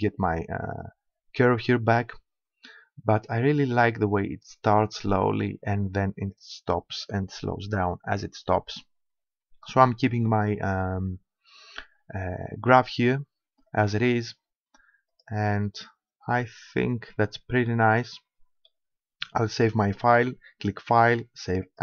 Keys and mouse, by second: 9.3-11.0 middle drag, 11.0-13.7 drag, 15.2 click, 15.8-19.8 middle drag, 19.8-21.7 drag.